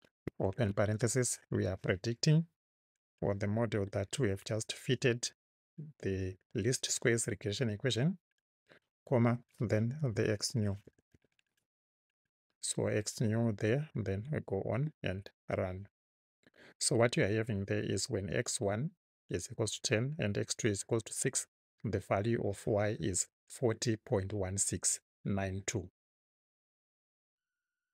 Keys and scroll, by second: 0.0-0.5 typing, 8.6 ', 9.8-11.6 typing, 12.1 Right.